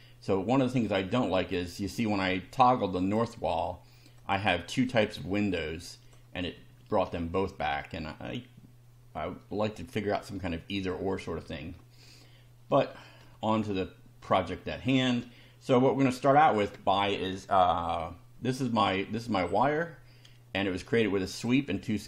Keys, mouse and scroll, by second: 3.0 click, 4.2 click, 4.9 click, 5.9 click, 6.6 space, 12.0 shift+scroll up 1, 12.8 shift+middle click, 14.3 shift+middle click, 16.3 click, 19.8 scroll down 1, 20.5 scroll down 1, 21.3 click.